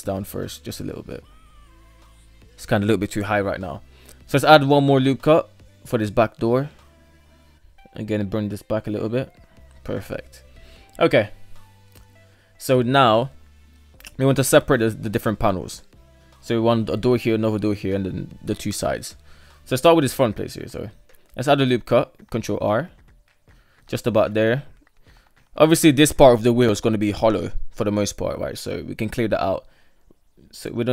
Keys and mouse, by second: 2.8 shift+middle click, 4.0 ctrl+r, 6.2 shift+middle click, 6.8 right click, 7.2 g, 9.2 shift+middle click, 11.5 shift+middle drag, 12.4 shift+middle click, 18.2 shift+middle click, 18.4 shift+middle click, 20.1 ctrl+r, 24.0 shift+middle drag, 29.0 shift+middle click.